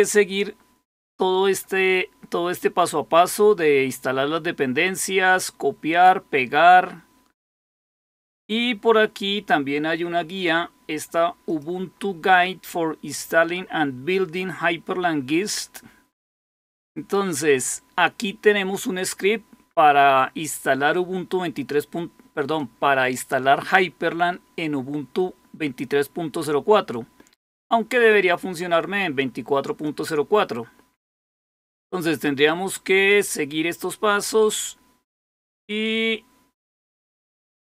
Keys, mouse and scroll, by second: 1.8-2.4 scroll down 2, 2.4 scroll down 1, 4.2-5.4 scroll down 2, 5.4-6.2 scroll down 1, 6.2-7.0 scroll down 1, 8.4-10.4 scroll up 1, 10.4-11.0 scroll up 1, 11.0-11.4 scroll up 1, 11.4 click, 18.3-19.8 scroll down 2, 19.8-28.3 scroll down 1, 28.3-29.8 drag, 32.3-35.5 scroll down 2, 35.5-36.4 scroll down 1, 36.4-37.6 scroll down 1.